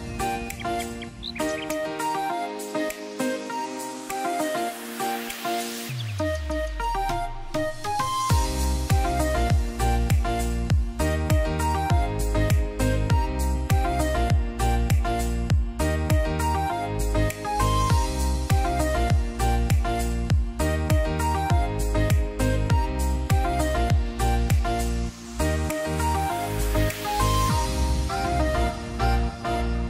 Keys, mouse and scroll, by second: 0.9 click, 4.3 click, 5.3 right click, 6.1 click, 9.2 click, 11.5 click, 13.5 right click, 15.1 click, 19.3 ctrl+i, 21.3 click, 22.3-23.5 alt+right click, 23.5 alt+scroll up 1, 24.8-25.7 alt+right drag, 26.3-26.9 click, 27.0 space, 27.1 click, 27.5 space, 28.7-29.7 drag.